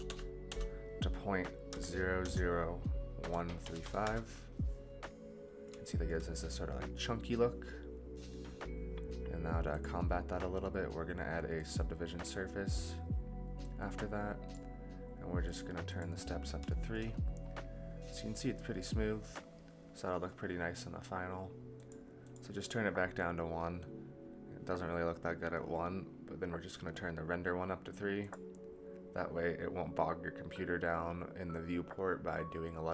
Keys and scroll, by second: 0.0 BackSpace.